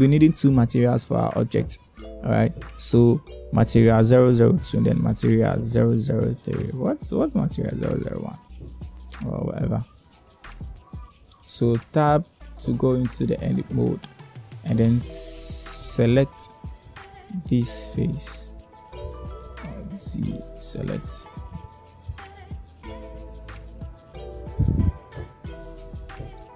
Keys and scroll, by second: 14.4 Tab, 17.6 1, 21.2 alt+z.